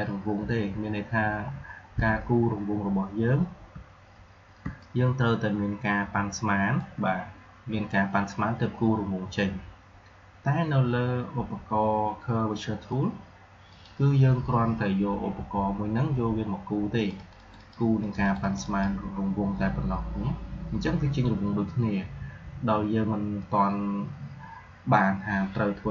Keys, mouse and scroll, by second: 1.1 alt+scroll up 1, 1.6 alt+scroll down 1, 3.6-4.5 alt+scroll up 1, 4.5 space, 4.6 click, 5.0 space, 13.6 click, 16.9 click, 20.8 click.